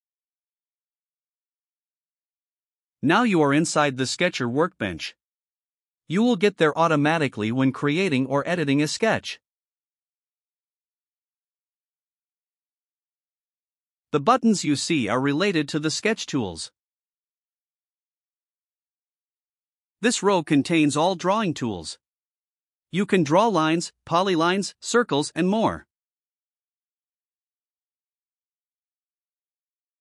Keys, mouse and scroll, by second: 1.1 middle click, 1.3 middle click, 2.3 right click.